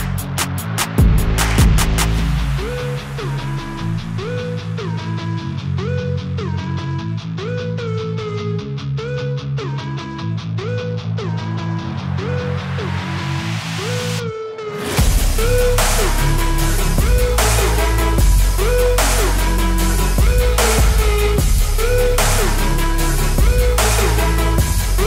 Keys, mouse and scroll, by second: 0.0 scroll up 2, 0.3 click, 0.4 click, 1.1 scroll up 1, 1.2 click, 1.4 click, 1.7 scroll down 4, 1.8-2.1 right drag, 2.1 ctrl+shift+s, 4.4 click, 4.4-4.7 scroll up 3, 4.8-5.3 scroll down 3, 4.9 click, 5.5 click, 5.9 click, 6.4 x, 6.5 shift+d, 6.6 ctrl+shift+right click, 6.7 ctrl+shift+click, 6.9 ctrl+s, 7.5 click, 8.0-9.5 drag, 8.2 ctrl+s, 9.8 click, 10.0-11.1 drag, 11.1 BackSpace, 11.4 BackSpace, 11.5 scroll up 4, 11.7 click, 12.4 click, 12.6 scroll down 11, 13.0 ctrl+j, 13.1-15.5 drag, 14.8 scroll down 2, 14.9 scroll up 4, 15.8 ctrl+s, 16.0 click, 16.3 scroll down 3, 16.9-17.3 drag, 17.4 scroll up 2, 17.5 click, 17.8 scroll down 3, 18.2 ctrl+s, 18.5 click, 18.7 ctrl+g, 18.8 scroll up 5, 18.9 Tab, 19.0 ctrl+s, 19.0 alt+click, 19.0-19.5 scroll down 12, 19.1 Tab, 19.2 click, 19.5 ctrl+z, 19.7 ctrl+alt+g, 20.0 click, 20.4 ctrl+j, 21.8 scroll up 4, 21.8 ctrl+s, 21.9-23.3 drag, 22.6 scroll down 3, 23.5 click, 23.6 n, 23.8-24.1 scroll up 2, 24.4 click, 24.9-25.0 scroll.